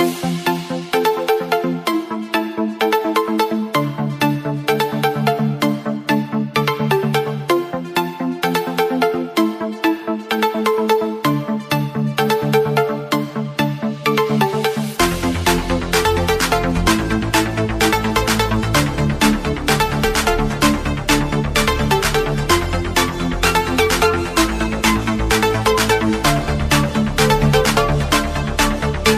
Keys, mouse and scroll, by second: 1.0 alt+scroll up 1, 1.9 scroll up 1, 2.8 scroll up 1, 4.2 scroll up 1, 5.3 click, 6.7 scroll down 1, 6.9 scroll up 1, 8.7 click, 9.5 scroll down 1, 10.5 click, 13.5 Delete, 15.1 alt+Tab, 16.7 super+e, 17.9 click, 18.5 scroll down 1, 20.3 scroll up 1, 22.8 click, 25.0-25.4 alt+scroll down 2, 26.2 click, 28.6 alt+scroll up 1.